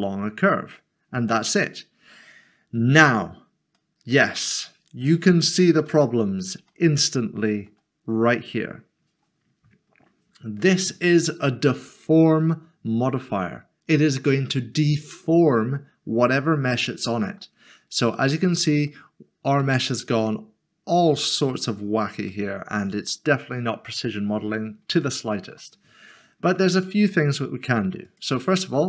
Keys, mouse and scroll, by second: 3.8 middle click, 5.3 shift+middle click, 6.2 scroll up 1, 16.8 middle click, 18.8 shift+middle click, 19.8 scroll up 1, 22.3 middle click, 23.1 shift+middle click, 24.3-24.9 scroll down 1, 25.1 shift+middle click, 28.0 click.